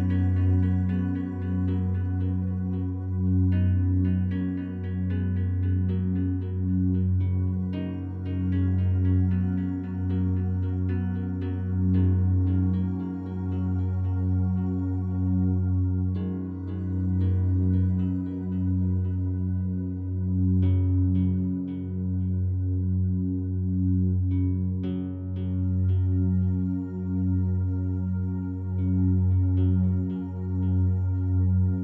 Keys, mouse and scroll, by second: 1.6 a, 4.2-7.2 alt+drag, 8.4 alt+click, 9.2 click, 9.8-12.5 alt+drag, 13.2 1, 18.9 ctrl+alt+click, 20.8 /, 21.7-24.6 alt+drag, 24.8-25.8 drag, 26.2 click, 26.5 click, 27.0 /, 28.1 click, 28.7 alt+click, 29.4 click, 29.7 click, 29.8 /, 29.9-30.8 drag, 30.9-31.8 drag.